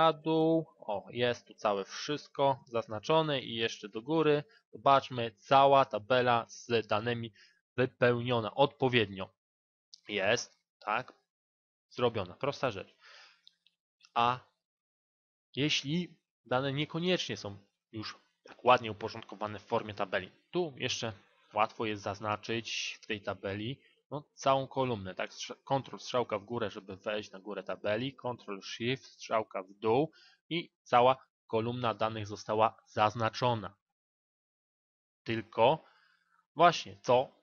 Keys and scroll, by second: 25.7 ctrl+Up, 27.9 ctrl+shift+Down.